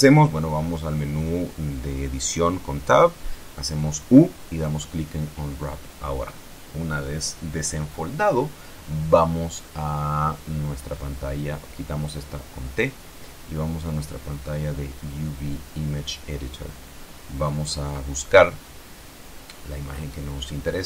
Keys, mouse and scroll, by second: 9.8-12.1 drag, 12.1 middle click, 12.4 t, 14.9 click, 16.1 click, 17.4 scroll up 2, 20.4 click.